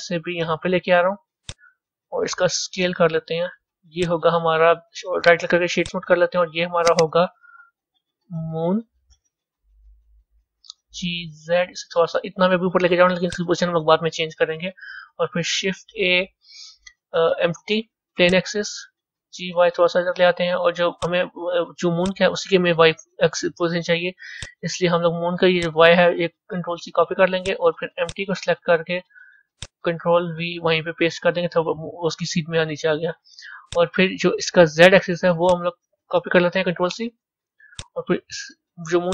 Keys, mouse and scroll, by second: 2.6 s, 5.1-6.7 right drag, 6.7 click, 6.9-8.2 drag, 8.2 o, 10.6 g, 15.3 shift+a, 19.1 g, 21.9 click, 24.3 click, 25.5-27.4 drag, 27.9 click, 29.4-32.4 drag, 33.5 click, 35.3-37.7 drag, 38.9 click.